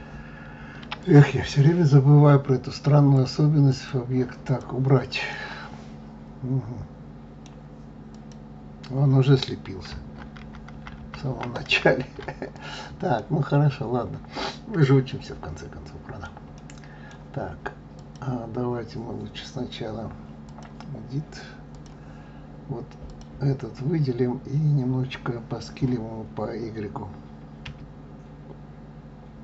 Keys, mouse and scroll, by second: 0.9 click, 3.1-4.5 drag, 5.2-8.0 middle drag, 8.0 click, 10.3 ctrl+z, 10.7 ctrl+z, 10.9 ctrl+z, 11.2 ctrl+z, 11.6 ctrl+z, 12.5 click, 13.1-16.1 middle drag, 16.5-17.9 middle drag, 17.9 click, 20.4-23.1 drag, 27.6 s.